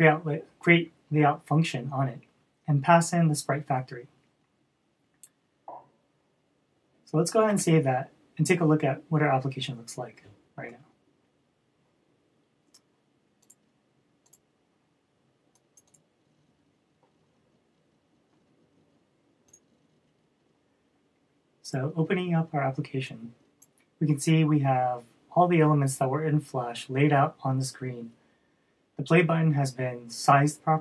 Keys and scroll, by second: 8.1 super+s.